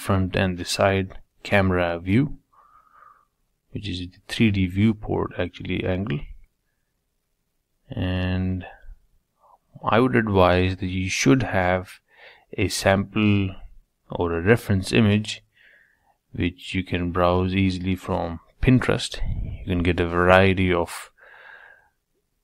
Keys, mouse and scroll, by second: 1.5 KP_1, 2.4 s, 5.4-7.2 middle drag, 7.2 Tab, 8.0 3, 9.2 ctrl+r, 12.3-14.3 middle drag, 16.1 ctrl+r, 19.8 click, 21.6 alt+click.